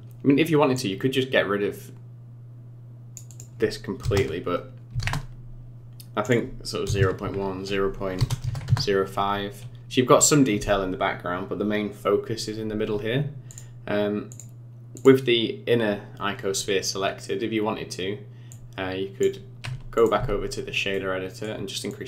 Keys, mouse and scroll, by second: 0.7 click, 3.3 click, 6.2 click, 9.5-12.7 scroll down 6, 13.5 click, 14.3 click, 14.9 click, 18.5 click, 19.9 click, 20.9 middle click, 21.9 click.